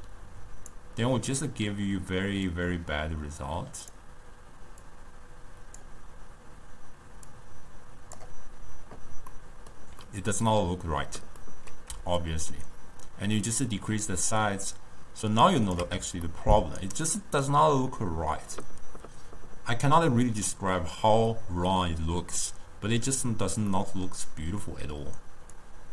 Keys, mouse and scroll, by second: 2.6 click, 5.0 click, 7.4 drag, 9.4-12.3 middle drag, 12.3-15.5 shift+drag, 16.4-19.5 ctrl+middle drag, 23.8-25.7 middle drag, 25.7 drag.